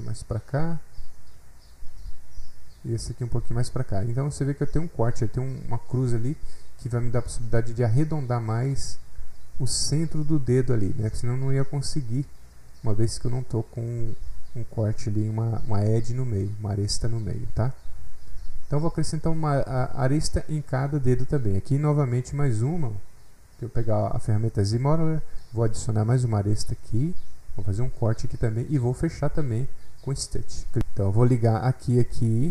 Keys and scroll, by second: 30.8 ctrl+z.